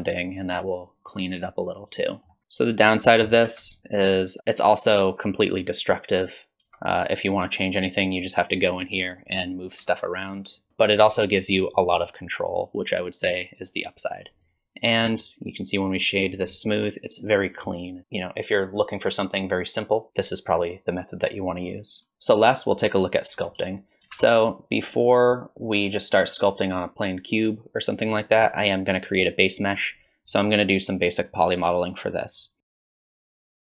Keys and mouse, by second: 1.8 middle click, 3.5 Tab, 6.6 Tab, 9.8 1, 10.7 Tab, 15.1-15.9 right drag, 15.9-17.4 drag, 17.4 middle drag, 24.0 shift+a, 32.6-33.8 typing, 32.6 middle click, 33.0 middle click, 33.5 middle click, 33.6 ctrl+r.